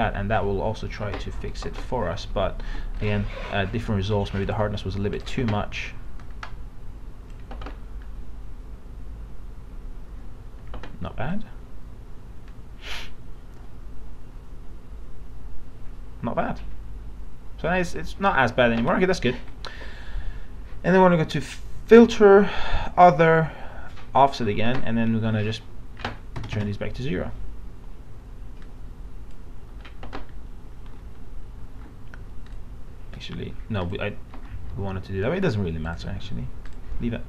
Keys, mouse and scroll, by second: 2.6 ctrl+z, 3.0 right click, 4.4-13.0 drag, 26.4 KP_0, 28.6-30.2 drag, 32.4-37.2 drag.